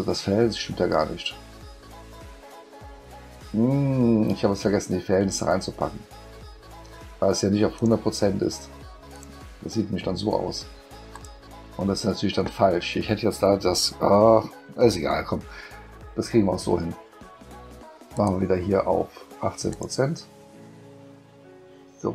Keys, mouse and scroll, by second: 7.7 click, 9.1 click, 11.1 click, 18.1 click, 19.7 click.